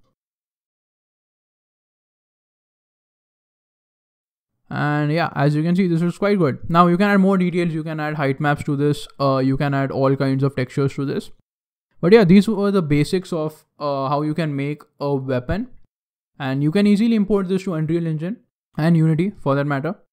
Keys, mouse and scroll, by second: 0.5 KP_3, 1.1-1.6 scroll up 5, 1.5 shift+middle click, 2.1 scroll up 2, 2.4 shift+middle click, 3.5 shift+middle click, 4.2 scroll down 9, 4.2 a, 4.4 scroll down 1, 4.6 shift+middle click, 5.2 scroll down 1, 5.4 middle click, 6.1 scroll down 2, 6.2 middle click, 6.2 scroll down 1, 10.7 middle click, 12.1 middle click, 12.1 scroll up 4, 12.4 middle click, 12.4 scroll down 1, 12.7 middle click, 16.5 middle click.